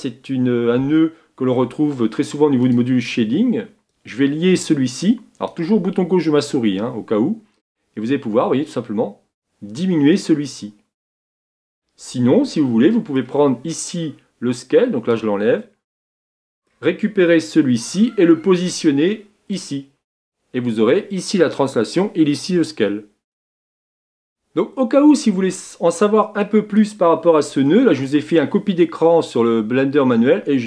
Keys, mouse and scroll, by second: 19.6-30.5 drag, 30.5 click.